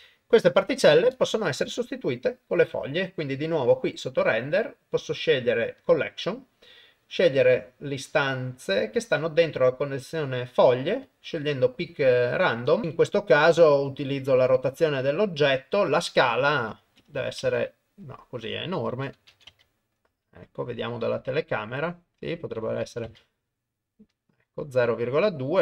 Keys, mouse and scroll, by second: 0.7 shift+Left, 2.0 middle click, 3.5 middle click, 4.2-5.9 drag, 6.8 middle click, 7.6-9.1 drag, 11.1 click, 13.9 click, 16.4-17.5 drag, 18.8 click, 20.1 KP_0, 22.3-25.6 drag.